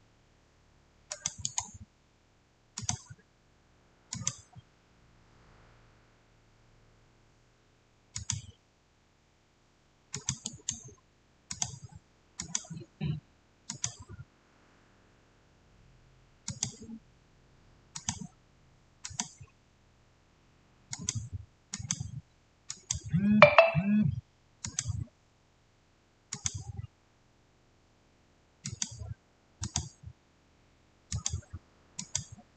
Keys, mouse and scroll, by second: 1.0 click, 1.3 right click, 2.6 click, 8.0 click, 10.0 click, 10.3 right click, 11.4 click, 16.3 click, 16.4 click, 24.5 click, 28.5 click.